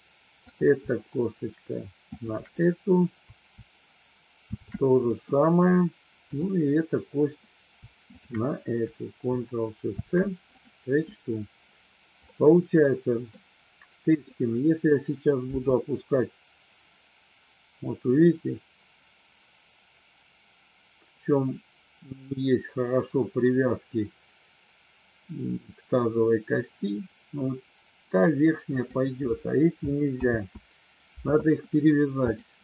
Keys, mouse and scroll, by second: 0.5-1.6 drag, 2.2-3.3 shift+drag, 4.3 ctrl+shift+c, 6.3-7.5 drag, 9.9 ctrl+shift+c, 12.3-13.3 middle drag, 15.5 g, 28.7 click, 30.2 ctrl+z, 32.3-32.6 drag.